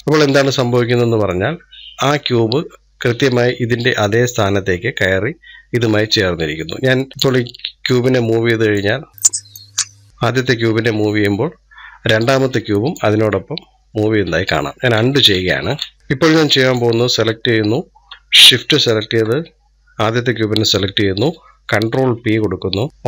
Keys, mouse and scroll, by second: 0.0-3.0 middle drag, 7.1 click, 9.0-10.0 drag, 13.5 ctrl+z, 14.0 ctrl+z, 15.0 ctrl+z, 15.5 ctrl+z, 16.4-21.5 drag, 21.8 ctrl+p.